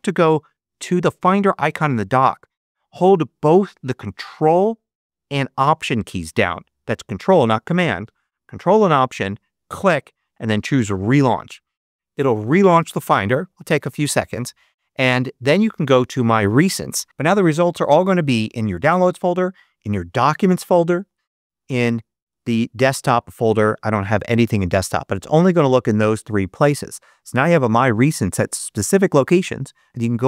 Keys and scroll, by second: 18.4 Down, 20.1 Down, 20.9 Down, 21.5 Down, 22.2 Down, 24.2 Down, 24.9 Down, 25.6 Down, 26.1 Down.